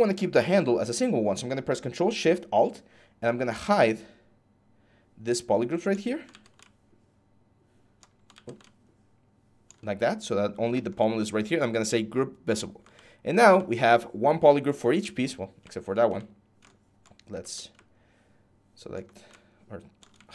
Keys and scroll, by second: 6.1 ctrl+z, 8.1 ctrl+z.